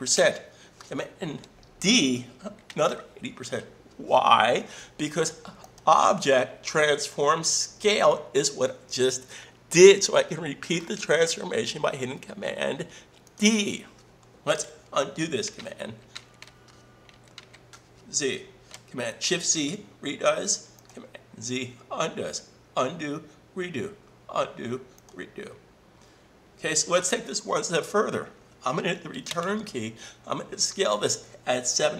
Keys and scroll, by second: 2.7 super+d, 15.6 super+z, 19.2 shift+super+z, 29.3 Return.